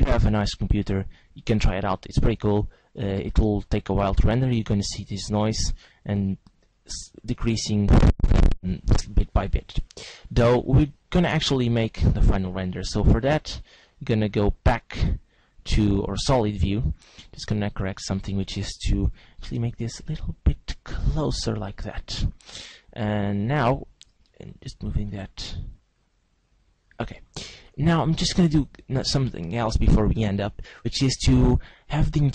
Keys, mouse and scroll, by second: 12.1 click, 17.5 right click, 18.1 right click, 19.5 g, 21.4 click, 21.7 g, 22.2 click, 23.9 right click, 25.4 click, 28.5 right click.